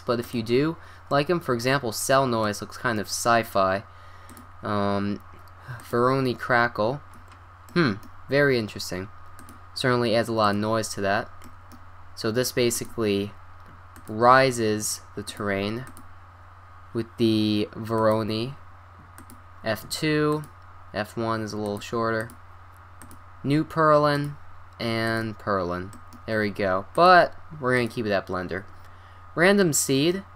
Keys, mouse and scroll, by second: 1.1-2.1 middle drag, 2.2-2.6 middle drag, 2.7 middle drag, 4.3-6.3 drag, 7.4-7.7 middle drag, 9.4-11.2 drag, 11.2-12.3 middle drag, 12.7-13.3 drag, 13.4-14.4 drag, 15.3-15.8 drag, 19.2-20.9 drag, 21.6-23.9 drag, 24.2-26.0 drag, 26.9-28.6 drag, 29.8 middle click.